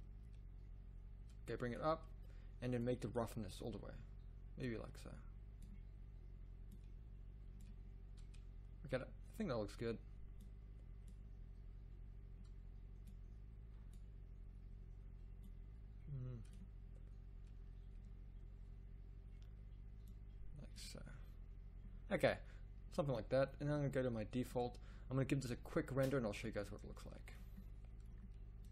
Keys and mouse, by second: 7.8 click, 10.5-12.3 drag, 15.7-18.2 drag, 28.2 middle click.